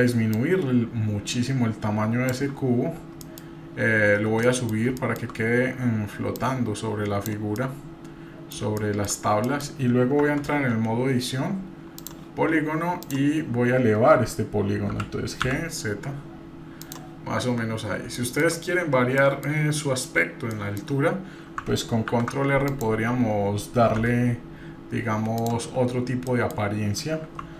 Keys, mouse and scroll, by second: 0.3-2.3 drag, 2.6-3.2 scroll up 1, 3.2-4.7 middle drag, 5.0 shift+middle drag, 5.3-6.4 scroll up 2, 6.4-7.3 drag, 7.6-8.5 middle drag, 8.8 shift+middle drag, 9.1-9.5 scroll down 1, 9.5 middle click, 10.2 Tab, 12.0 click, 13.0 click, 14.9 g, 16.0 g, 17.3-17.9 scroll down 1, 18.2 shift+middle click, 18.8-19.2 scroll down 2, 19.2 middle click, 20.6 middle click, 22.1 ctrl+r, 26.3 middle click, 27.4 3.